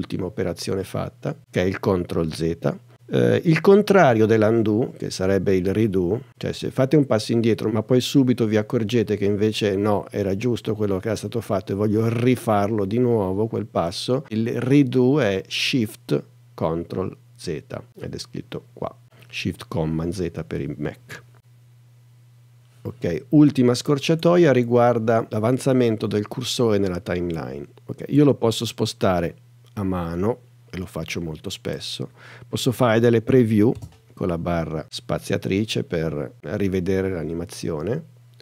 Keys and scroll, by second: 33.8 space.